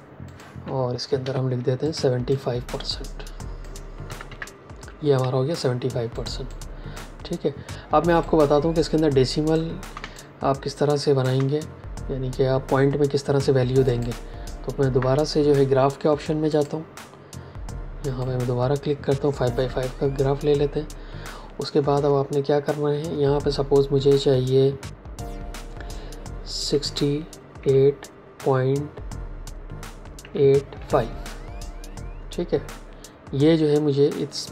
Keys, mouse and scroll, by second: 1.1 t, 1.8 click, 3.9 KP_7, 4.2 KP_5, 5.1 Escape, 6.0 click, 9.9 space, 10.0 click, 10.4 space, 13.8 click, 16.4 click, 19.6 KP_Enter, 26.6 KP_6, 27.5 KP_8, 28.3 KP_Decimal, 30.1 KP_8, 30.7 KP_5.